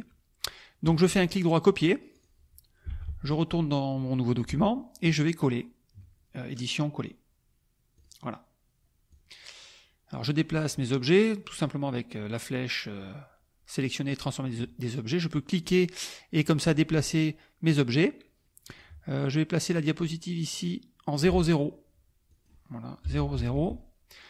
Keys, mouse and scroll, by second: 0.8 right click, 2.2 click, 2.9 alt+Tab, 6.6 click, 7.9 click, 9.1-10.3 drag, 15.7-18.9 drag, 20.1-21.3 drag, 22.3 click, 23.2 Tab, 23.4 KP_0, 23.6 Tab.